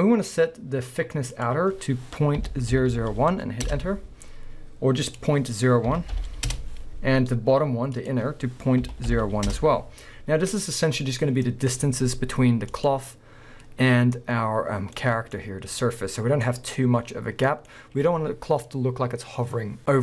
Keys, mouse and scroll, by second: 2.9 0, 3.8 Return, 6.6 Return, 9.6 Return, 11.5-12.7 middle drag, 11.7-12.7 scroll up 2, 12.7 click, 13.4-20.0 middle drag, 13.4-14.8 scroll down 2, 14.8 scroll down 1, 15.4 scroll up 1, 16.5 scroll up 1, 17.2 scroll down 1, 17.7 scroll up 1.